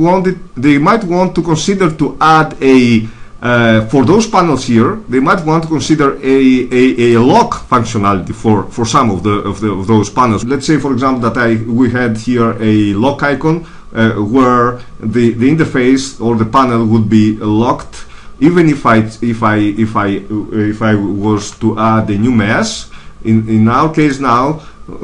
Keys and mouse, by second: 10.4-15.3 middle drag, 21.1 shift+a.